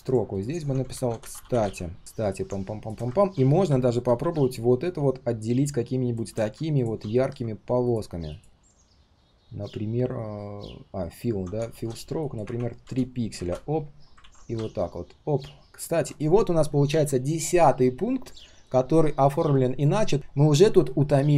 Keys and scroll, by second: 7.2 ctrl+alt+c, 8.7 ctrl+alt+v, 14.2 ctrl+d.